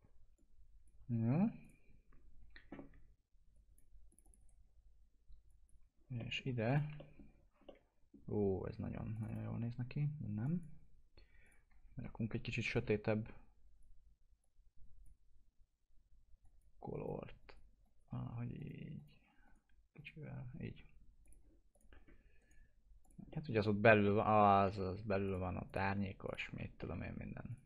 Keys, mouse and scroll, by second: 0.3 ctrl+click, 4.3 right click, 5.4 click, 6.1 alt+middle click, 6.6 click, 6.9-9.1 middle drag, 9.1-16.4 drag, 21.9-22.3 scroll down 1, 22.3 right click, 23.0 click, 23.2-25.2 middle drag, 25.2 click, 26.2 ctrl+click, 26.5 alt+q, 26.7 alt+middle click, 27.4 click.